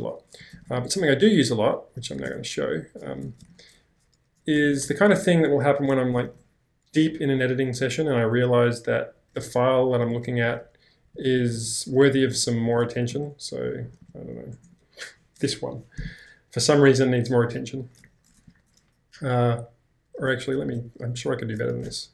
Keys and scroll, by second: 0.2-1.2 typing, 2.3 ctrl+l, 2.9-5.8 typing, 4.6 ctrl+l, 6.3 ctrl+h, 9.8-11.4 typing, 12.5 typing, 18.0 ctrl+k, 18.5 ctrl+j, 20.5 -, 21.8-22.1 typing.